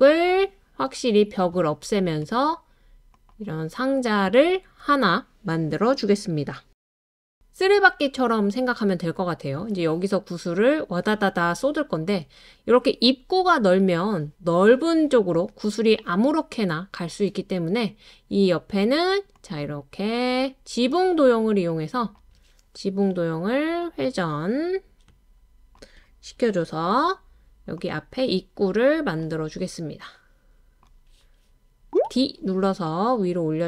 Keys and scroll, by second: 8.6-9.7 typing, 17.5 typing, 21.9-22.7 typing, 31.9 d, 32.0 d.